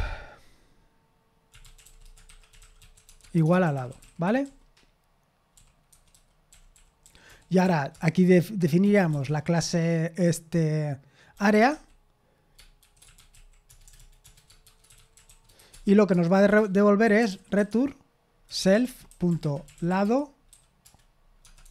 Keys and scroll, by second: 2.5-4.2 typing, 4.2 Escape.